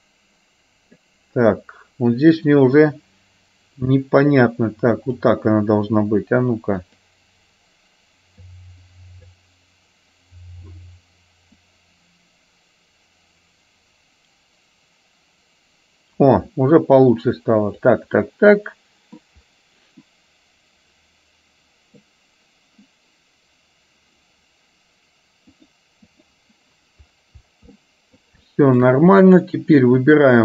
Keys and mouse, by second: 4.0-5.4 drag, 7.0 click, 8.6 click, 11.9-18.0 drag, 18.2-19.2 middle drag, 20.1-22.1 middle drag, 25.7 click, 27.9 middle click, 28.6 shift+middle click, 30.1 click.